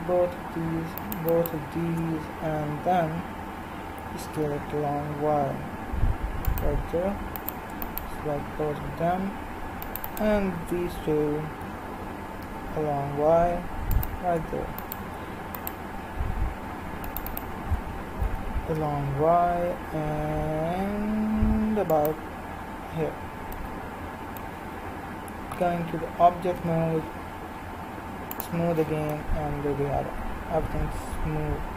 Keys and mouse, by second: 4.0 s, 7.4-13.5 right drag, 11.7 s, 14.9-18.8 right drag, 18.2 s, 18.8-21.4 drag, 23.6-25.6 middle drag, 25.6 Tab, 26.6 z, 28.4-30.2 drag, 30.2-31.6 middle drag.